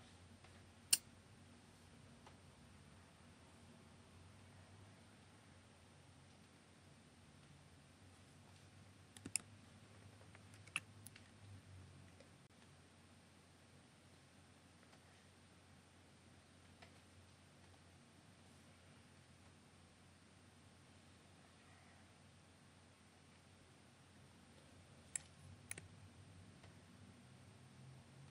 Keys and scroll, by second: 10.5 super+F9.